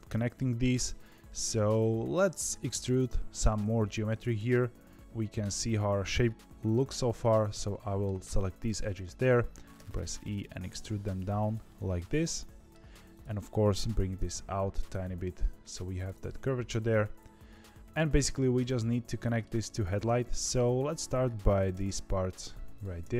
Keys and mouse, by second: 2.8 click, 5.0 KP_3, 7.7 middle click, 9.1 KP_3, 9.7 e, 11.6-12.6 middle drag, 13.4 middle click, 13.9 g, 16.1-17.9 middle drag, 19.0 middle click, 19.9 2, 21.7 f, 22.7 shift+click, 23.0 f.